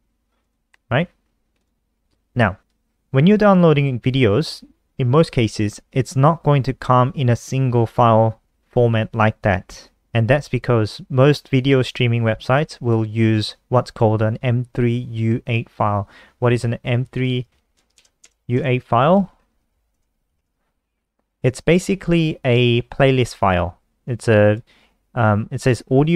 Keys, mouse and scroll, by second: 1.6 click, 16.6-22.1 typing, 23.8 click.